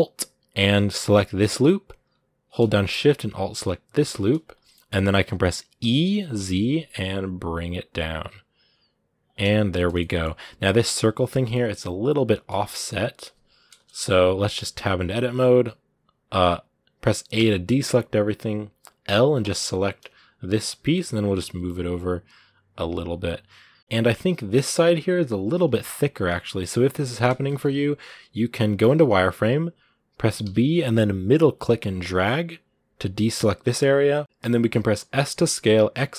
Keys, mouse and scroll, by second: 0.5-4.3 alt+right drag, 4.3 scroll down 2, 4.5-5.6 middle drag, 5.6 e, 9.3 scroll down 2, 9.6-11.2 shift+middle drag, 11.2 scroll down 2, 11.3-12.5 middle drag, 12.5 scroll up 1, 12.6 middle click, 13.5 KP_1, 14.1-14.5 scroll up 3, 14.5 Tab, 25.5-28.7 shift+middle drag, 28.7 z.